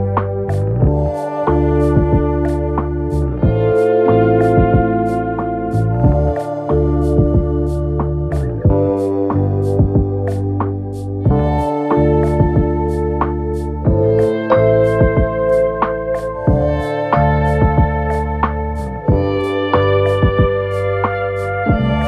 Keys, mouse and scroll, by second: 0.9 ctrl+click, 7.4 ctrl+=, 8.6 space, 11.3 ctrl+-.